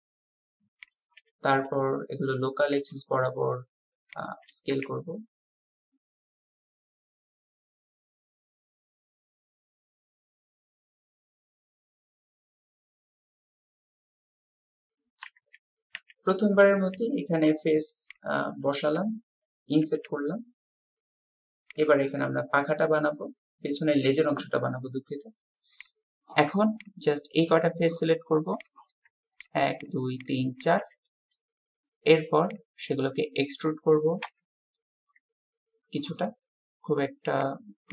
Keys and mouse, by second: 1.2 click, 4.1 shift+click, 6.4 click, 6.8 click, 7.4 ctrl+z, 7.6 click, 9.0 g, 9.5 s, 9.9 click, 10.1 shift+click, 10.3 click, 11.1 shift+click, 11.4 s, 12.2 click, 13.0 s, 13.6 click, 14.1-15.4 drag, 15.4 a, 16.0 a, 17.1-19.4 middle drag, 19.9 g, 22.1-23.9 middle drag, 25.8-26.9 middle drag, 27.2 click, 29.4 shift+click, 29.8 shift+click, 30.9 click, 33.7 click, 34.2 KP_3.